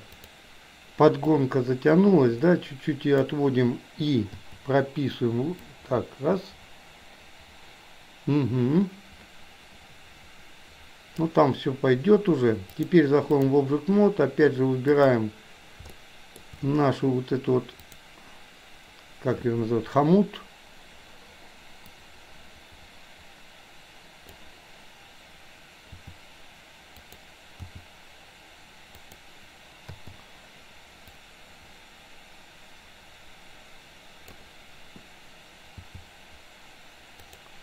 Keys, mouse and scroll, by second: 0.2 click, 1.6-3.3 drag, 4.4 i, 5.8-11.3 drag, 12.8-13.7 drag, 14.9 click, 16.1-16.4 shift+middle drag, 17.9 click, 21.9-24.6 drag, 25.9 r, 27.7 g, 30.1 i, 31.3-34.4 drag, 35.9 g.